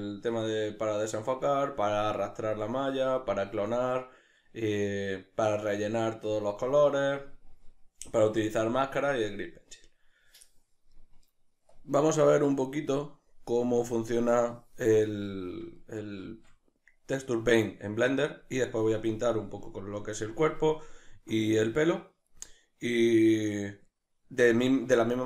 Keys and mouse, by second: 15.3-25.2 middle drag.